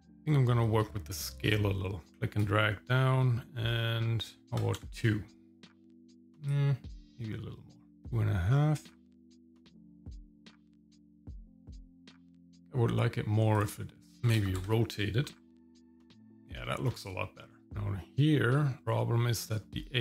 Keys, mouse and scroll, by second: 0.9-2.1 scroll up 4, 2.1-4.8 drag, 6.5-8.0 drag, 8.5 scroll up 2, 9.9 scroll down 2, 10.4 middle click, 11.0 scroll down 1, 15.5 click, 15.8 shift+middle click, 16.9-17.5 scroll up 1, 17.5 shift+middle click, 17.6 scroll down 4, 18.1 middle click, 18.8 click.